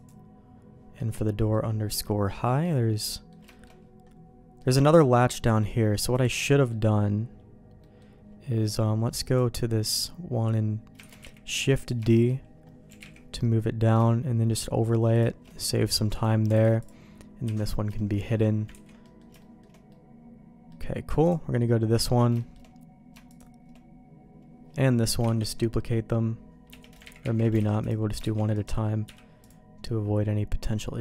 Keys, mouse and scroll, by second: 1.0 middle click, 1.5 middle click, 2.6 middle click, 3.5 shift+middle click, 4.6 middle click, 6.1 click, 6.5 middle click, 7.8 middle click, 9.2 click, 9.9-10.9 drag, 11.0 shift+d, 12.0 shift+middle click, 12.9 g, 16.6 alt+a, 17.4 h, 17.9 shift+middle click, 18.7 ctrl+s, 19.0 middle click, 19.4 shift+middle click, 19.9 middle click, 21.2 click, 22.0 middle click, 22.4 shift+middle click, 23.3 shift+click, 25.4 shift+d, 27.2 ctrl+z, 27.3 ctrl+z, 27.6 alt+a, 27.8 click, 28.2 shift+d, 29.0 m.